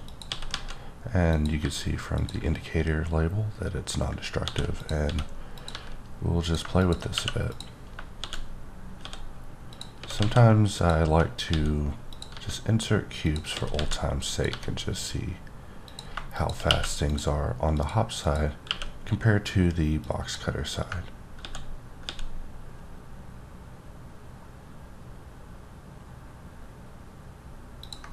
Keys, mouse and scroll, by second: 0.0 click, 0.3 s, 0.5 z, 1.3 click, 1.6 g, 2.1 click, 4.2 shift+click, 4.4 shift+d, 4.8 click, 5.0 s, 5.5 click, 5.7 g, 6.4 click, 7.1 q, 7.5 click, 8.2-12.3 typing, 9.7 click, 10.7 click, 12.1 click, 13.2 click, 13.5 s, 13.7 z, 14.3 click, 14.5 g, 15.9 click, 16.4 click, 16.7 q, 17.1 click, 17.7 click, 18.2 click, 18.6 q, 20.0 click, 22.0 ctrl+x, 24.9 ctrl+Num_Lock, 24.9-25.4 ctrl+scroll up 2, 25.4-27.8 ctrl+scroll, 27.8 ctrl+click.